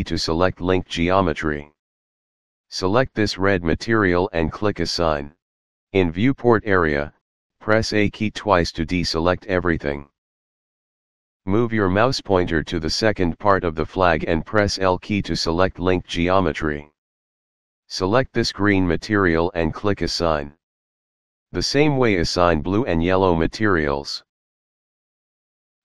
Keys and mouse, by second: 0.1 l, 3.4 click, 4.9 click, 8.8 a, 11.5 l, 15.5 l, 18.0 click, 19.5 click, 21.3 a, 22.0 l, 22.8 click, 23.4 a, 24.1 l, 24.9 click.